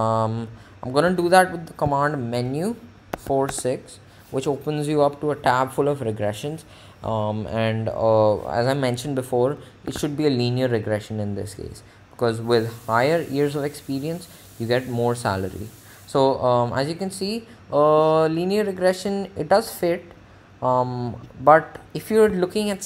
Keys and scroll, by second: 2.2 Menu, 3.4 4, 3.8 6, 10.0 1.